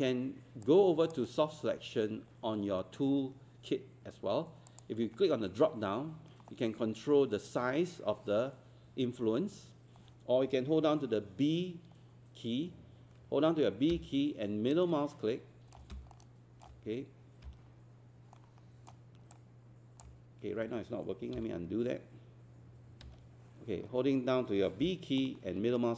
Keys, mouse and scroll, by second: 0.6 click, 13.9-15.3 typing, 14.8 middle click, 16.1 middle click, 16.4 typing, 18.4 middle click, 18.4 typing, 21.4 a, 25.2 middle click, 25.4 typing.